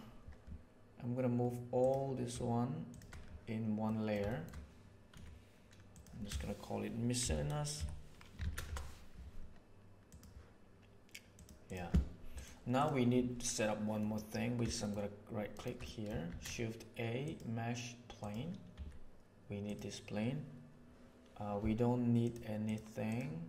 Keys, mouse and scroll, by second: 2.8 shift+right click, 3.8 middle click, 4.2 shift+middle click, 5.1 m, 11.3 click, 12.3 click, 14.0 middle click, 14.8 shift+middle click, 15.8 shift+middle click, 16.2 shift+a, 16.4-18.3 drag, 18.7 s, 22.2 right click, 22.6 right click, 23.0 click.